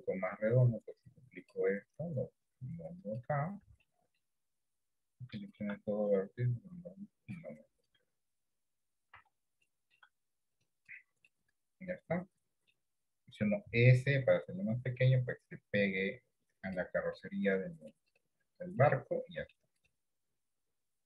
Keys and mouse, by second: 0.3-1.6 drag, 2.3 click, 3.9 shift+middle click, 6.2-7.5 drag, 8.0 click, 9.3 Tab, 9.8 shift+middle click, 11.4-12.8 middle drag, 13.7 s, 17.3 middle click, 18.9 middle click.